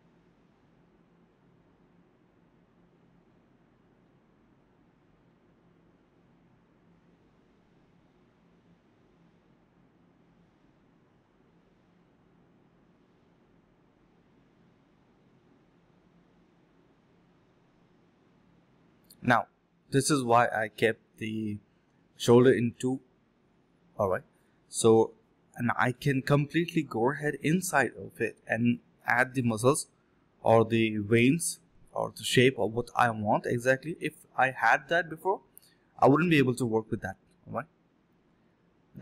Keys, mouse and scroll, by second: 0.7 shift+click, 2.0 alt+click, 2.1 alt+click, 3.6 double click, 5.7 shift+click, 7.5 2, 7.6 2, 7.8 double click, 8.4 shift+click, 8.4 shift+double click, 8.5 shift+click, 9.8 double click, 10.3 shift+click, 10.8 alt+click, 11.2 shift+click, 11.5 double click, 11.7 shift+click, 11.8 shift+double click, 11.9 shift+click, 12.1 alt+click, 12.5 alt+click, 14.7 alt+click, 14.8 alt+click, 15.6 f, 16.0 ctrl+shift+click, 17.0 ctrl+z, 17.2 ctrl+z, 17.2 ctrl+shift+click, 17.7 ctrl+shift+x, 18.8 ctrl+shift+q, 19.4 alt+click, 19.5 alt+click, 20.3 ctrl+shift+click, 20.6 ctrl+z, 20.7 ctrl+shift+click, 21.5 alt+click, 21.7 alt+click, 22.0 f, 22.7 F1, 23.1 double click, 24.7 alt+click, 24.8 alt+click, 25.2 double click, 28.5 alt+click, 28.7 alt+click, 28.9 double click, 30.4 shift+click, 30.5 shift+double click, 30.6 shift+click, 31.2 alt+click, 31.7 double click, 32.7 shift+click, 32.8 shift+double click, 32.9 shift+click, 33.3 alt+click, 33.4 alt+click, 34.4 alt+click, 34.7 alt+click, 35.2 alt+click, 35.4 alt+click, 35.6 alt+click, 36.1 alt+click, 36.5 double click, 37.4 shift+click, 37.5 shift+double click, 37.6 shift+click, 38.3 alt+click, 38.4 alt+click.